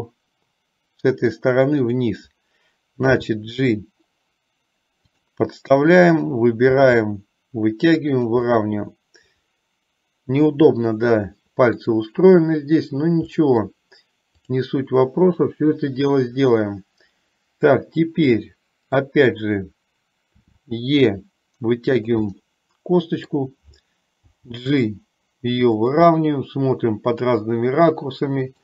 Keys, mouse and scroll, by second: 0.2-1.4 middle drag, 1.9 click, 3.2 g, 6.9 g, 8.6-12.1 middle drag, 13.6 middle click, 14.4 click, 15.2-17.2 middle drag, 17.3 middle click, 18.4 middle click, 20.6 e, 22.4-23.4 middle drag, 24.4 g, 26.3-28.6 middle drag.